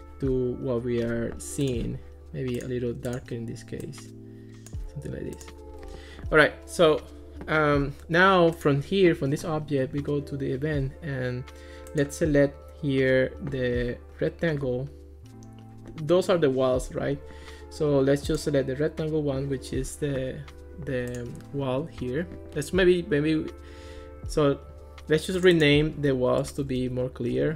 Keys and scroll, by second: 26.5-27.5 typing.